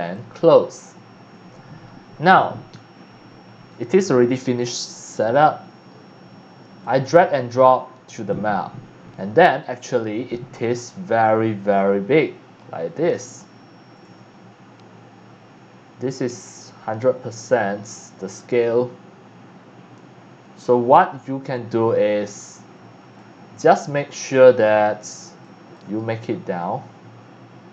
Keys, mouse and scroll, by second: 4.0 click, 6.8-8.3 drag, 9.1 scroll down 1, 9.6-18.4 right drag, 20.0-23.9 right drag, 25.5 click.